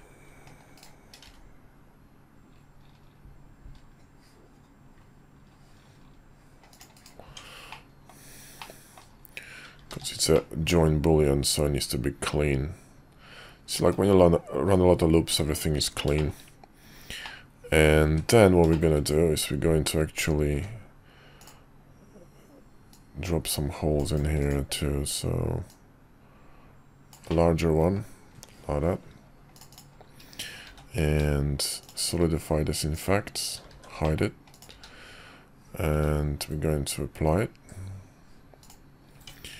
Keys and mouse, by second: 1.2 ctrl+r, 7.2 Tab, 7.7-8.1 middle drag, 8.6-9.0 middle drag, 9.9 shift+2, 10.3-14.6 middle drag, 15.3 `, 16.1 shift+middle drag, 17.2-17.9 middle drag, 18.0 `, 18.7 middle drag, 20.5 d, 22.9-24.2 drag, 24.4 click, 25.7-29.8 drag, 27.5-27.9 middle drag, 27.5-27.9 right drag, 30.6 q, 33.7 shift+2, 34.0 middle click, 34.7 q, 35.9 q, 39.1 Tab.